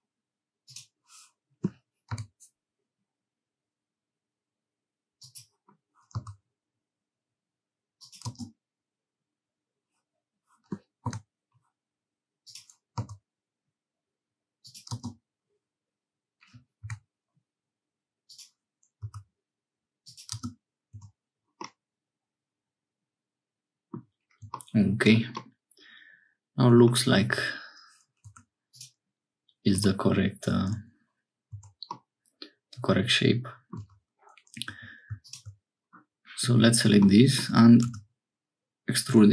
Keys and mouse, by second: 20.9 Tab, 21.6-24.0 drag, 25.1 click, 25.4-26.9 drag, 27.2 Tab, 28.2 1, 28.7 click, 29.7 g, 31.5 Tab, 31.9-33.6 drag, 33.8 Tab, 34.7 2, 37.9 e.